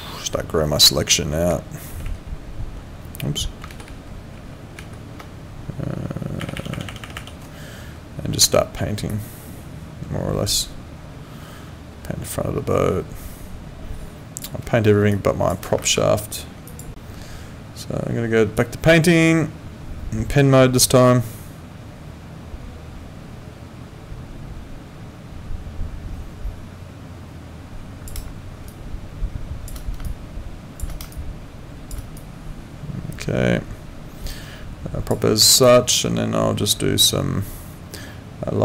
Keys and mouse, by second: 16.9 click, 18.6 click, 28.7 shift+click, 30.0 shift+click, 31.1 shift+click, 35.6 click.